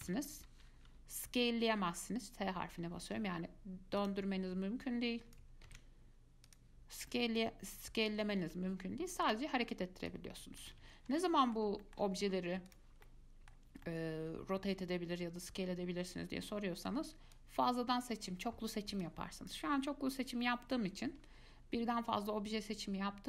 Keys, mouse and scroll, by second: 2.0 s, 4.2 click, 5.0 click, 5.9 ctrl+z, 6.7-8.6 drag, 8.6 ctrl+z, 9.4 click, 11.0 ctrl+z, 11.3 scroll down 1, 11.4-12.9 middle drag, 12.9 click, 13.2-17.1 middle drag, 17.5 click, 19.2 click, 20.0-23.0 middle drag.